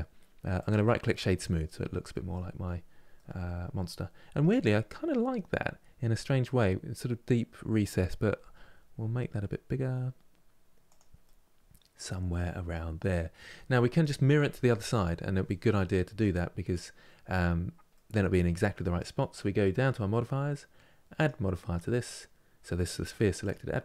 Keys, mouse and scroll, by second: 0.3-1.8 right drag, 1.8 middle click, 2.4-2.9 scroll down 1, 2.9-5.3 middle drag, 5.3-6.3 scroll down 2, 6.3-8.1 middle drag, 8.1 s, 10.9-13.9 middle drag, 15.7 scroll up 2, 17.6-20.6 middle drag, 22.3 click.